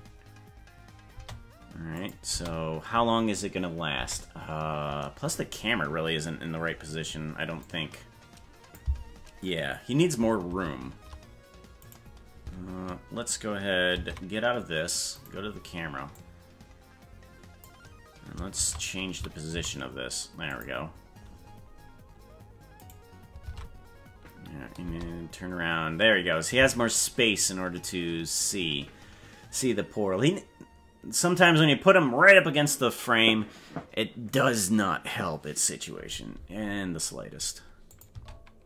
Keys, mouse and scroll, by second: 1.1 space, 1.9 click, 2.3 space, 3.9 space, 7.6-8.7 drag, 10.5 shift+`, 14.0 ctrl+Tab, 15.2 right click, 16.1-17.6 drag, 18.5 shift+`, 22.8 right click, 23.5 ctrl+Tab, 24.8 space, 26.6 space, 37.9 click, 38.1 space.